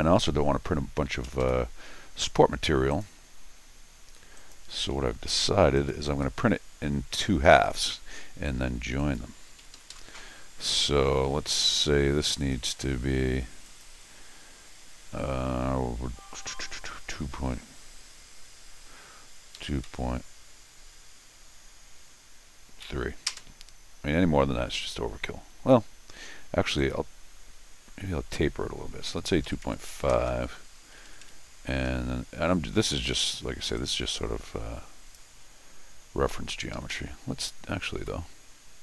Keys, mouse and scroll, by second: 1.2 Escape, 1.4 Escape, 2.9 click, 4.4 click, 5.8 ctrl+click, 9.0 click, 9.6 Escape, 9.7 Escape, 9.9 Escape, 10.8 Escape, 11.3 d, 12.4 click, 13.6 click, 26.8 click, 30.9 Escape, 31.2 Escape, 31.9 Escape, 33.0 Escape, 33.8-35.1 drag, 35.5 middle click, 36.3 Escape, 36.5 Escape, 36.7 Escape, 36.9 Escape, 38.0 l.